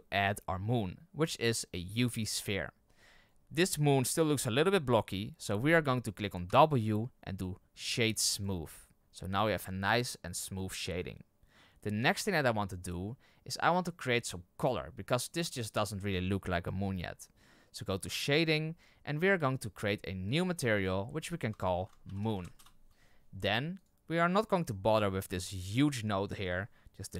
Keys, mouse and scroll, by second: 2.9-3.4 scroll up 9, 6.4 w, 18.4 click, 20.3-22.5 drag, 22.5 o, 23.8 click.